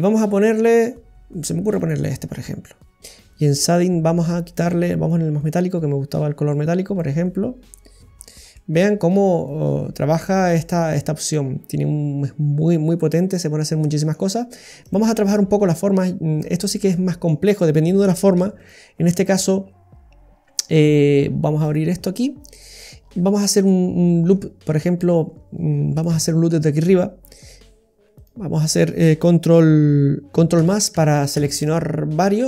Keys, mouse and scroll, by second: 1.6 click, 3.0 scroll up 1, 3.3 right click, 3.8 scroll down 1, 4.6-5.0 scroll down 1, 8.2-9.8 scroll down 5, 8.6 middle click, 14.9 click, 15.6-16.0 scroll up 4, 16.2-16.7 scroll down 3, 16.7 middle click, 17.6 right click, 18.4 Tab, 18.6 right click, 21.7 click, 22.1-22.6 scroll down 2, 22.5 middle click, 23.0-23.4 scroll up 4, 23.6 middle click, 26.0 middle click, 26.7 middle click, 28.1 right click, 30.5 ctrl+KP_Add.